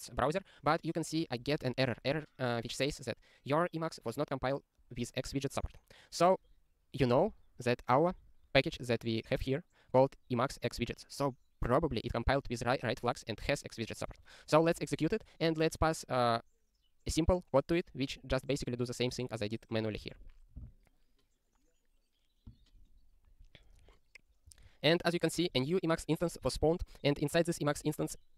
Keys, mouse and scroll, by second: 8.5 click, 9.9 click, 14.0 click.